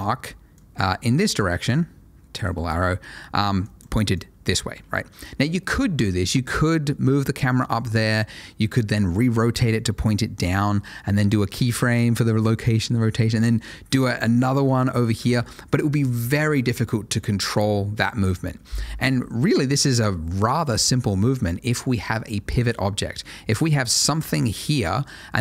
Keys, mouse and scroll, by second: 7.1 ctrl+shift+a, 23.8 click, 24.1 double click.